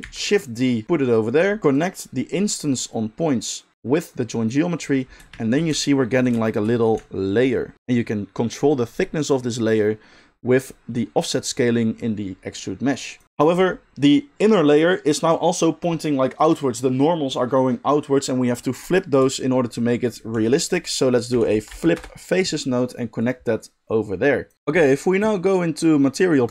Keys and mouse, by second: 0.0 shift+d, 1.7-23.3 drag, 20.3 shift+a, 23.3 middle click, 23.6 click, 24.5-26.5 middle drag.